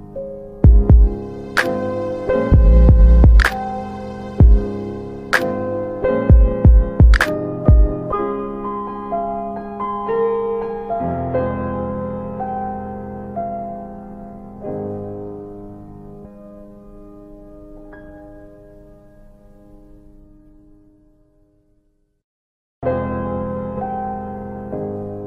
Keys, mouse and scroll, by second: 0.3 alt+middle click, 0.9 scroll down 2, 1.5 alt+middle click, 2.1 middle click, 3.1 scroll up 1, 3.8 alt+middle click, 4.4 click, 6.6 alt+middle click, 8.3 middle click, 11.9 alt+middle click, 14.1 click, 16.2 right click, 16.9 click, 17.2 double click, 17.4 click, 17.6 double click, 17.8 click, 18.4 ctrl+click, 20.5 click, 21.3 alt+middle click, 24.6 alt+middle click, 25.1 middle click.